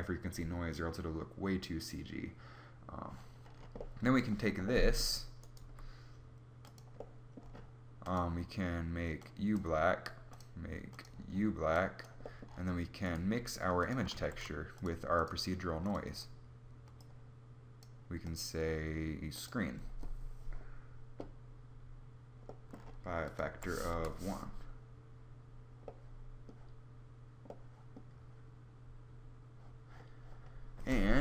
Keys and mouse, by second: 5.8 g, 12.8 g, 13.8 shift+a, 15.4 click.